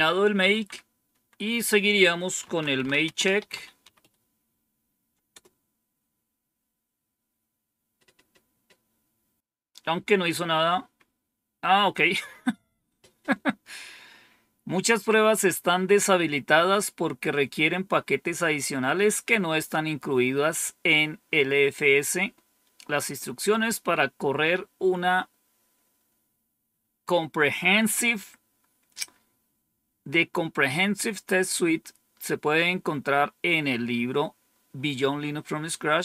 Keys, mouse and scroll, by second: 0.4 Up, 1.0 Down, 2.1-4.4 typing, 24.3-25.0 scroll down 1, 35.8-36.0 scroll down 1.